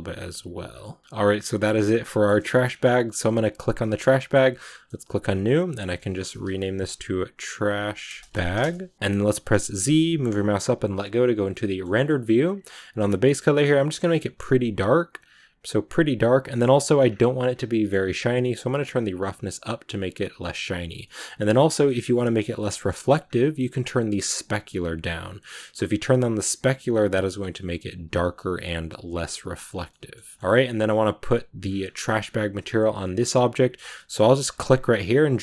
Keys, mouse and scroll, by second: 0.0 right click, 0.1 g, 0.6 scroll down 2, 0.7-2.5 middle drag, 2.5 shift+scroll up 3, 3.4 right click, 3.8-4.9 shift+middle drag, 4.9-8.5 drag, 8.9 z, 11.4-13.8 middle drag, 13.8 click, 16.4-18.9 middle drag, 18.9-20.9 drag, 20.9-24.0 middle drag, 24.0-26.8 drag, 29.8 middle click, 30.0 scroll down 1, 30.1-35.4 shift+middle drag.